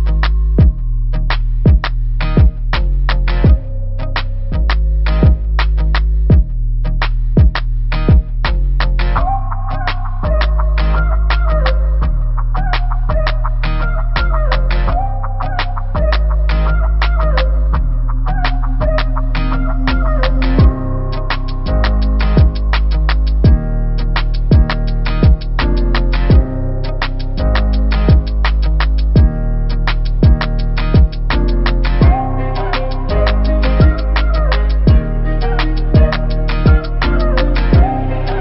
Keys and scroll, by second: 0.6 Return, 4.4 7, 5.1 0, 24.5 v, 28.8 ctrl+t, 32.2 Return.